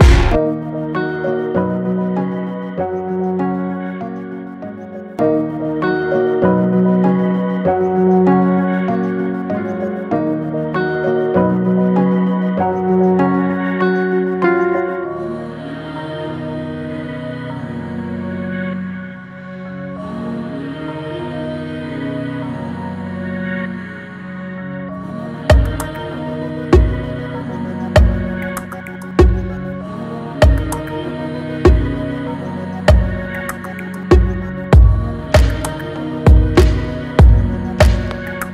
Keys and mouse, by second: 12.6 click, 13.7 KP_0, 15.8-16.1 shift+drag, 17.9 click, 18.7 shift+d, 19.5 Escape, 20.8-22.7 drag, 23.6-24.0 shift+drag, 24.2-24.8 drag, 25.8-27.3 drag, 27.3 middle click, 27.9-28.2 shift+drag, 30.1 click, 31.0-31.8 drag, 34.9-35.7 drag, 36.8-38.5 drag.